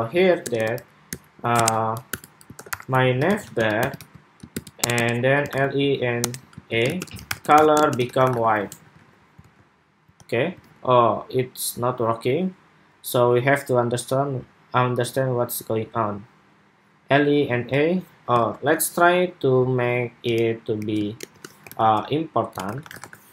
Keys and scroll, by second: 3.7 super+v, 8.4 super+s, 8.7 super+Tab, 9.2 super+r, 9.9 super+r, 10.3 super+Tab, 17.3 super+Tab, 18.1 super+Tab, 23.1 super+s.